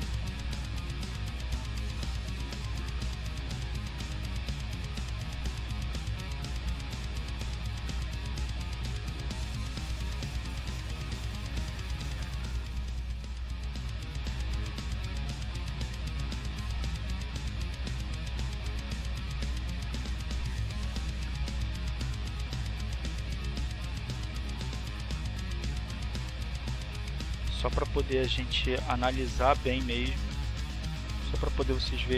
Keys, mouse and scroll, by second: 2.3-5.3 drag, 6.9 click, 7.7 click, 9.1 click, 11.0-15.2 drag, 15.6 click, 16.2 click, 17.5 click, 20.8-27.7 drag, 28.0-29.1 drag, 29.6 click.